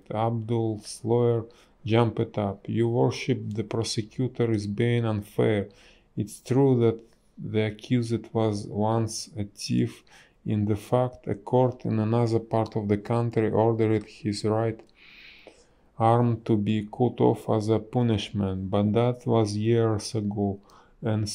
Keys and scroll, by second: 3.1 space, 7.8 space, 9.3 space, 11.0 space, 13.6 space.